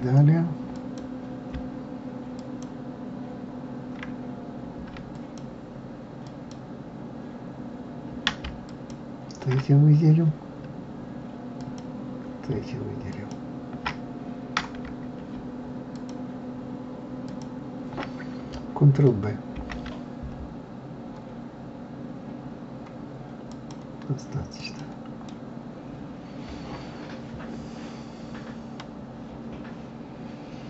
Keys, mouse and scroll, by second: 0.7 click, 2.4 shift+click, 5.1 alt+click, 6.2 alt+click, 8.6 alt+shift+click, 9.6-11.5 scroll down 3, 11.5 alt+click, 13.1 alt+shift+click, 14.3-14.8 scroll up 1, 15.9 alt+shift+click, 17.2 alt+shift+click, 19.5 ctrl+b, 24.6 click, 25.3-28.3 middle drag.